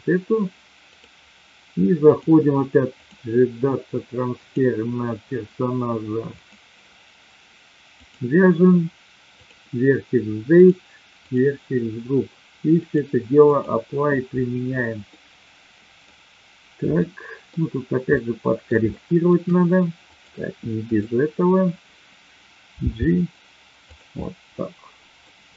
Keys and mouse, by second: 0.8 click, 2.0-3.0 drag, 4.3 click, 6.3 click, 10.6 click, 11.2 click, 12.8-13.7 drag, 15.2-15.9 middle drag, 16.9-17.6 middle drag, 18.0-18.7 middle drag, 18.9 shift+middle click, 20.0 click, 22.7 g, 23.8 click, 24.2-25.3 middle drag.